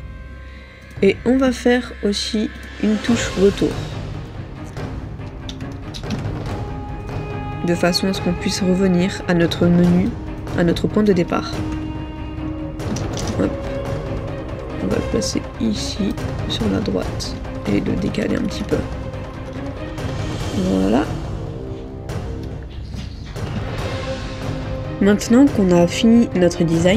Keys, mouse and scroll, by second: 5.6-5.9 typing, 11.1-11.8 typing, 13.0 typing, 13.3 Return, 18.0 shift+Left, 18.2 shift+Left, 18.4 shift+Left, 18.6 shift+Left, 18.9 shift+Left, 19.3 shift+Left, 19.4 shift+Down, 19.6 shift+Down, 20.3 shift+Down, 20.7 shift+Down, 26.8 middle click.